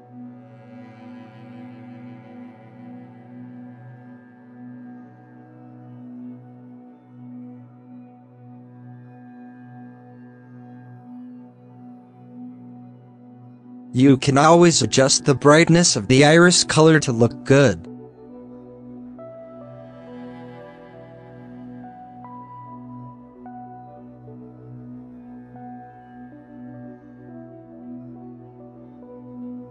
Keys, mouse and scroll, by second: 0.6 z, 1.7-6.8 drag, 6.8 shift+middle click, 6.9 scroll up 4, 7.6 scroll down 2, 7.9 middle click, 8.1 scroll up 4, 8.2-8.6 middle drag, 8.6 scroll down 3, 8.8-10.8 middle drag, 12.0-12.6 scroll up 8, 12.3 middle click, 12.6 middle click, 13.1 scroll down 9, 13.1 middle click, 13.6 click, 14.0 shift+a, 16.8 scroll up 2, 16.9 scroll down 1, 17.0 scroll up 2, 17.4-20.7 drag, 20.7 scroll down 6, 21.2 alt+a, 21.5 scroll up 1, 22.0 click, 23.8 scroll down 1, 24.3-24.7 middle drag, 24.7-25.6 scroll up 8, 25.0 middle click, 25.6-26.5 drag, 26.5-27.0 scroll up 4, 27.0-28.8 drag, 28.8 alt+a.